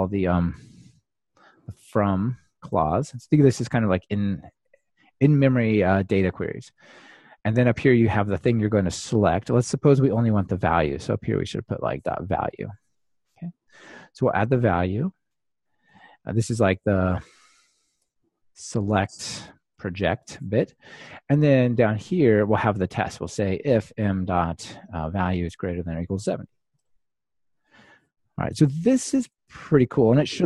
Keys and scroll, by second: 10.9 Return, 25.1 Return, 25.8 Return, 29.6 ctrl+r.